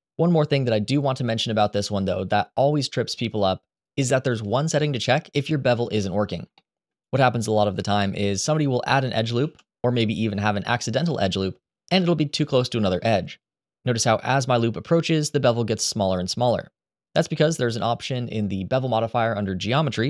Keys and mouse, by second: 1.4-3.6 drag, 5.6 middle click, 6.3 shift+middle click, 9.1 ctrl+r, 17.2 click, 19.9 click.